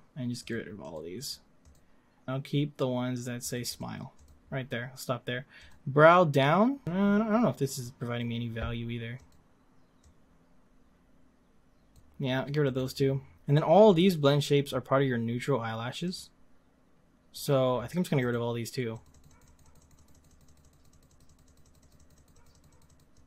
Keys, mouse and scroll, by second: 0.5-5.7 drag, 6.8-9.3 drag, 10.1-13.3 drag, 16.0 click, 16.5-18.3 drag, 19.0-23.2 drag.